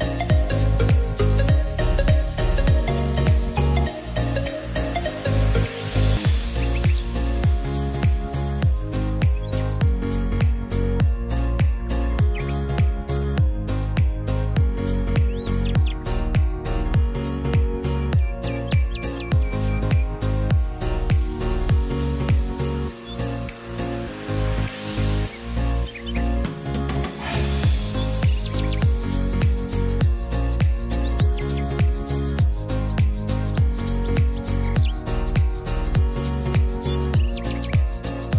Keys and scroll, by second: 1.3 ctrl+z.